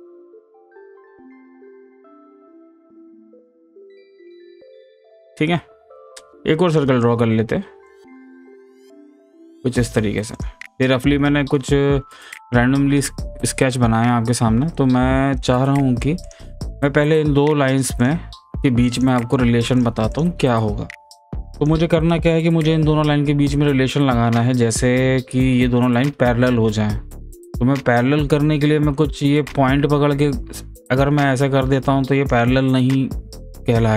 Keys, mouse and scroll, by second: 6.7 click, 7.9-10.4 drag, 16.2 click, 18.0 click, 19.8 click, 29.7-33.9 drag.